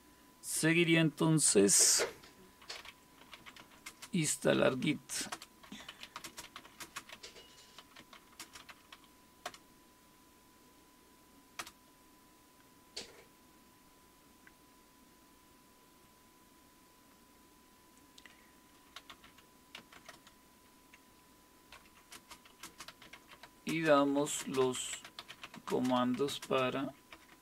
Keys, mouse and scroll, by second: 1.5-9.5 typing, 11.6 typing, 18.7-20.5 typing, 21.7-27.4 typing.